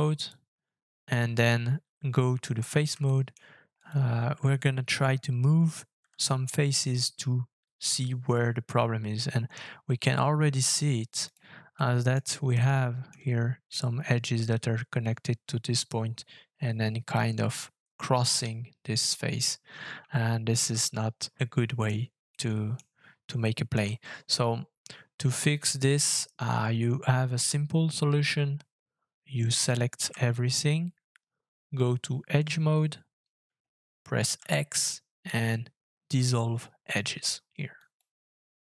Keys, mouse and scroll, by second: 3.0 shift+middle click, 6.0 g, 11.7 middle click, 12.1-12.6 scroll up 2, 12.6 shift+middle click, 13.0 shift+scroll up 1, 20.6 ctrl+z, 21.3 shift+middle click, 22.3 middle click, 23.2 scroll down 1, 23.4 shift+middle click, 30.0 a, 34.4 x.